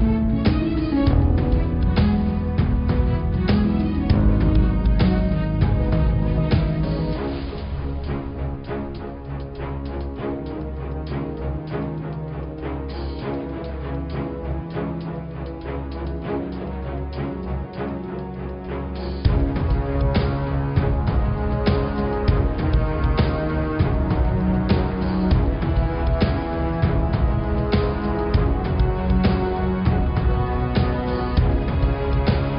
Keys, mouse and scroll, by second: 1.5 ctrl+r, 6.9 middle click, 7.5-7.9 scroll down 2, 8.0 click, 8.8 click, 9.2 click, 10.0 s, 11.2 middle click, 11.8-12.2 scroll down 1, 12.2 middle click, 12.3-12.7 scroll down 1, 12.7 middle click, 13.0-13.8 scroll up 1, 13.8 shift+click, 14.2 click, 14.8 alt+click, 15.3 alt+click, 15.9 ctrl+alt+click, 16.7 ctrl+alt+click, 18.0 alt+shift+click, 21.2 click, 21.5 s, 25.8 middle click, 26.3 Tab, 26.5 scroll down 1, 26.8-28.6 middle drag, 28.6-29.4 scroll up 2, 29.4 shift+a, 31.6 s.